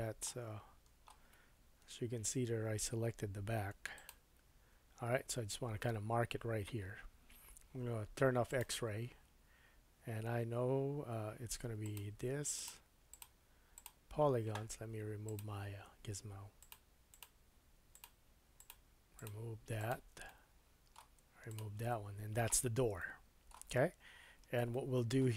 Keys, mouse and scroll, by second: 1.9 KP_1, 3.9 shift+click, 8.5-11.9 drag, 12.5 shift+click, 13.1 shift+click, 13.7 shift+click, 15.2-16.7 drag, 17.1 shift+click, 17.9 shift+click, 18.6 shift+click, 19.2 shift+click, 19.8-22.3 shift+drag, 20.3 middle click, 22.3-25.3 middle drag.